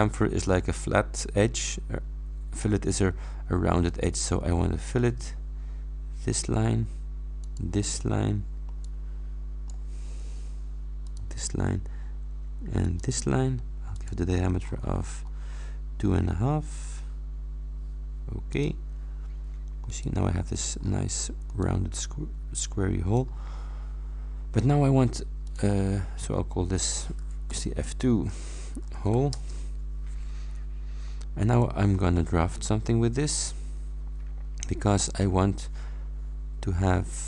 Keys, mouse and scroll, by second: 4.0 click, 7.5 click, 8.7-10.0 drag, 11.1 click, 12.9 click, 14.0 click, 15.6-16.3 scroll up 3, 18.6 click, 19.9 click, 21.6 click, 22.3 middle click, 22.4-23.4 drag, 25.6 click, 27.6 F2, 28.5-29.7 typing, 31.5 click, 32.6 click.